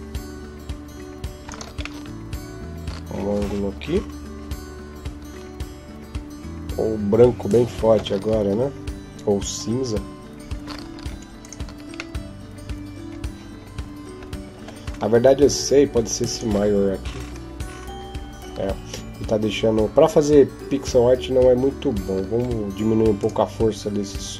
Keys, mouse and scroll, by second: 1.8 middle click, 10.7 Escape, 11.2 right click, 12.0 middle click, 14.7-16.1 scroll down 8, 16.1 click, 21.8 Escape, 21.8-22.5 scroll up 5, 23.0 right click.